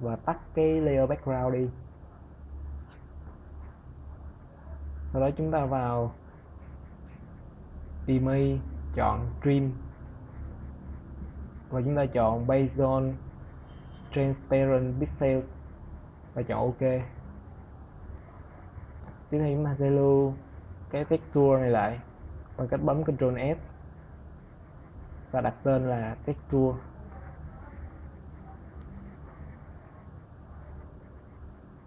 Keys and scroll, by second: 22.2 ctrl+s, 25.0 shift+t, 25.2 e.